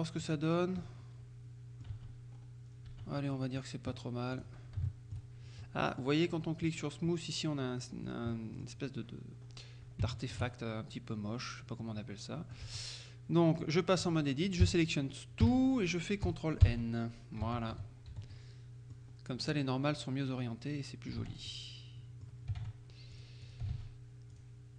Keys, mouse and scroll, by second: 0.6-0.9 scroll down 2, 0.9 click, 2.0 Tab, 2.4-2.8 scroll up 1, 2.8-3.3 scroll down 1, 3.0 Tab, 3.3 middle click, 4.4 click, 4.9 shift+middle click, 5.7 shift+middle click, 8.1 scroll down 2, 8.4 click, 9.5-10.1 scroll up 2, 10.2 shift+click, 12.7 Tab, 14.7 a, 15.5 a, 16.7 ctrl+n, 17.5 Tab, 17.8 z, 18.4 click, 19.3-19.6 scroll down 1, 19.6 click, 21.3 Tab, 21.6 click, 22.7 ctrl+Tab, 23.3 click, 23.8 ctrl+Tab, 24.4 click.